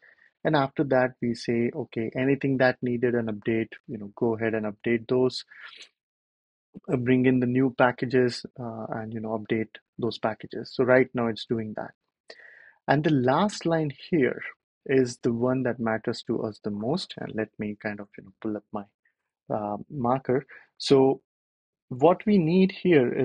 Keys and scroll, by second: 1.2 super+c, 2.4 super+v, 3.0 Return, 4.5 y, 4.7 Return, 17.9 ctrl+alt+super+p.